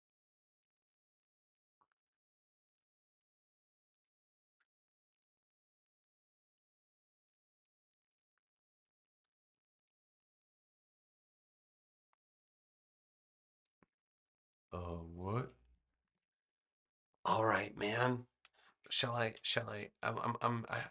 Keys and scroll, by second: 0.5 v, 7.8 v, 15.7 super+-, 16.9 space, 19.3 super+=, 20.3 space.